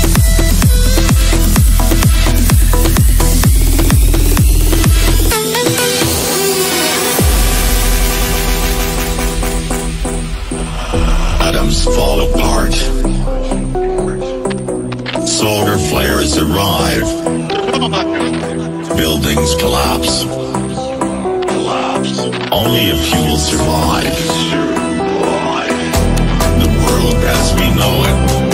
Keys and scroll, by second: 0.1 Escape, 1.7 Escape, 4.7 Escape, 6.1 Escape, 24.1 F3, 25.5 Escape, 26.7 F3, 27.0 Escape.